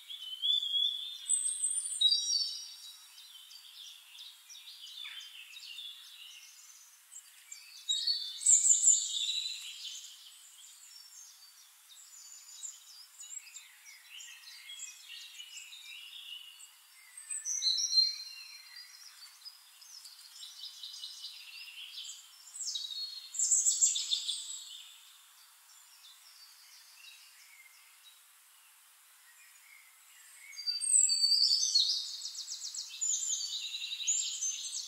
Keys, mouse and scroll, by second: 2.5 click, 3.7 click, 4.6 click, 5.2 click, 5.4 click, 6.1 click, 6.3 click, 7.1 click, 7.7 click, 7.9 middle click, 8.1 click, 8.8 click, 9.2 ctrl+click, 10.4 click, 11.1 click, 11.3 middle click, 11.9 click, 12.3 click, 12.8-13.2 drag, 13.3 click, 14.3 click, 15.3 click, 15.5 click, 16.1 click, 16.9 click, 17.9 click, 18.8 ctrl+d, 19.2 click, 19.6 click, 20.3 ctrl+click, 21.1 click, 21.5 click, 22.3 shift+click, 22.5 shift+click, 23.1 ctrl+d, 23.3 click, 24.3 shift+-, 24.8 click, 25.7 click, 26.4 click, 26.7 click, 27.8 click, 28.4 ctrl+click, 29.1 ctrl+click, 29.7 click, 30.4 click, 31.0 ctrl+d, 31.1 ctrl+click, 31.9 click, 32.9 click, 33.5 click, 34.4 ctrl+g.